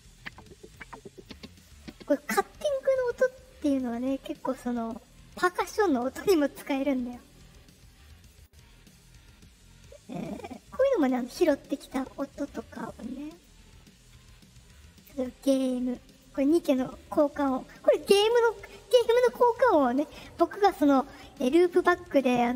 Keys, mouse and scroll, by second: 0.1 click, 0.6 click, 1.1 click, 1.7 click, 8.2 click, 10.9 click, 11.7 click, 13.2 click, 14.9 click, 16.0 click.